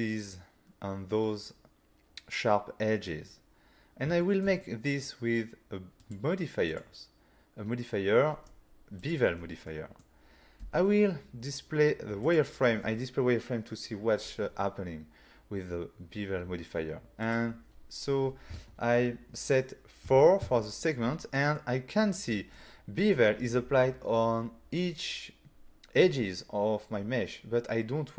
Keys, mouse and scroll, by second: 3.6-4.1 scroll down 2, 4.2 shift+middle click, 4.6 middle click, 6.0 click, 6.7 click, 9.0 click, 9.7 middle click, 10.6 f, 12.3 click, 16.0-16.3 scroll down 4, 17.2 click, 20.1 4, 20.4 Return, 21.6 middle click.